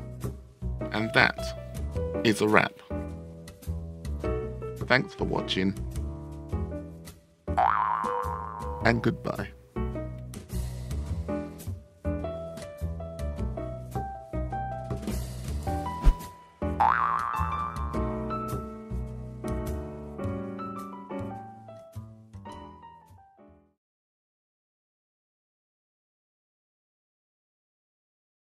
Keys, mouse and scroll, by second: 0.5 u, 0.8 Return.